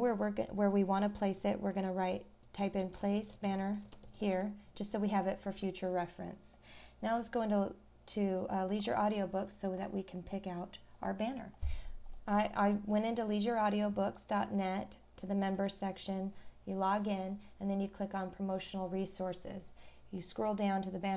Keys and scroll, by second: 11.0-11.4 scroll up 1, 15.1 scroll down 1, 20.1-20.5 scroll down 1.